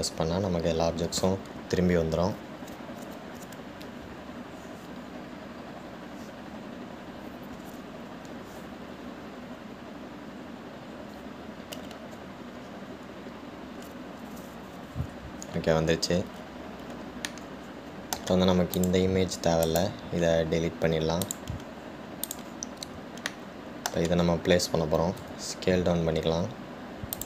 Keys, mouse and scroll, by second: 15.5-17.5 scroll down 1, 17.5-18.6 scroll down 1, 18.6-20.0 middle drag, 20.0 click, 21.1-23.5 right drag, 23.5 drag, 24.5-26.5 shift+middle drag, 26.5 s.